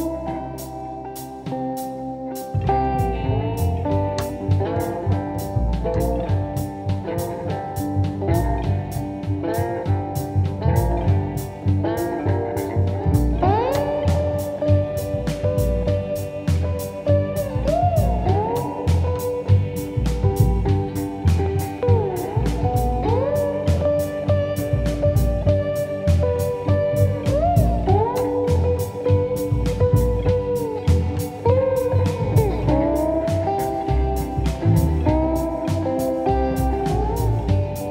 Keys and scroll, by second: 2.5-3.0 typing, 3.2 Return, 5.6 ctrl+d, 9.2 F1, 13.2 F1, 35.4 ctrl+d, 35.6 Escape, 35.9 ,, 36.5 ,.